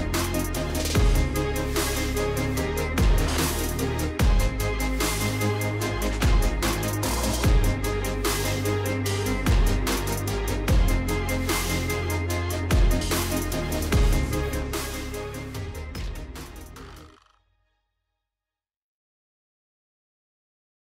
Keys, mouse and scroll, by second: 1.3 click, 1.4 click, 2.9 click, 3.9 click, 4.7 space, 10.8 space, 11.1 space, 14.7 space, 14.9 space, 18.2-20.9 typing.